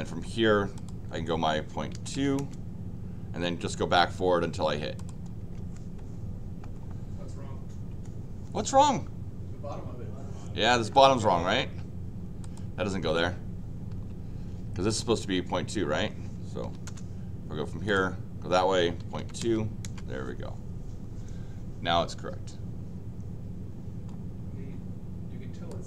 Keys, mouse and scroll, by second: 0.7 click, 4.9 click, 12.4 click, 14.9 click, 16.6 l, 16.8 Return, 17.8 click, 25.7 click.